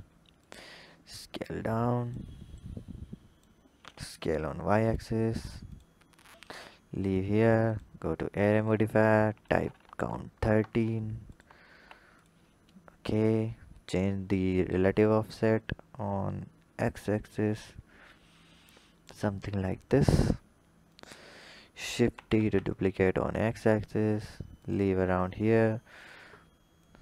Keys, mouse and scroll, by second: 1.1 drag, 2.4 click, 3.7 s, 6.9 click, 7.6-12.1 drag, 13.2-18.5 drag, 19.3-20.7 scroll down 4, 20.7-22.0 drag, 22.0 shift+d, 25.8 drag, 26.7 click.